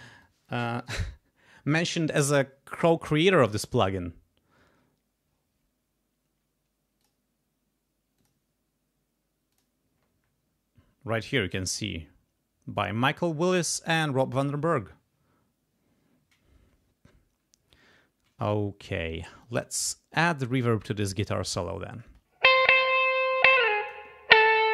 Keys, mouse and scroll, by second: 0.2 click, 7.0 click, 8.2 click, 9.5 click, 19.4-21.2 drag, 22.0 space, 23.5 click.